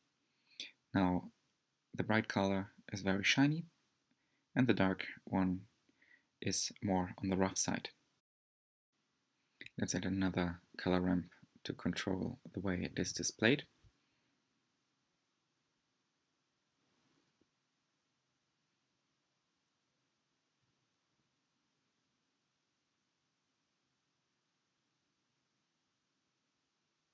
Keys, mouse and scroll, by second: 2.6-8.6 drag, 13.6-19.6 drag, 20.3-22.2 middle drag, 22.2-23.8 scroll up 1, 23.8-26.8 drag.